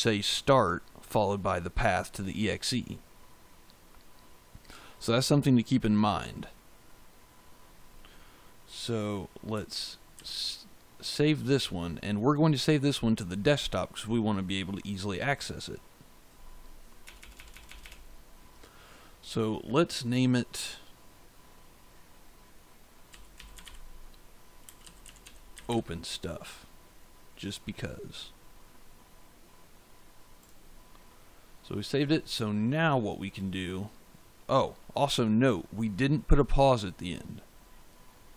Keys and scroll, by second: 10.1 ctrl+s, 16.9 BackSpace, 22.8-25.9 typing.